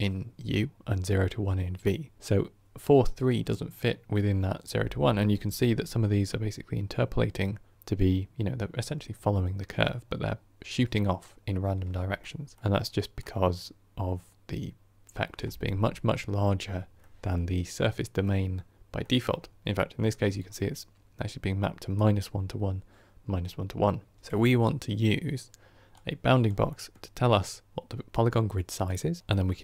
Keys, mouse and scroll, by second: 5.9-9.9 scroll down 3, 12.1-29.6 middle drag.